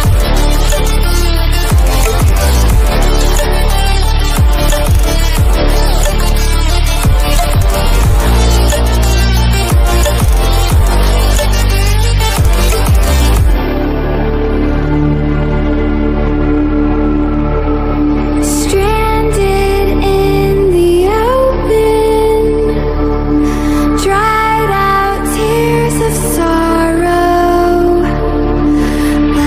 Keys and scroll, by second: 8.1 ctrl+=.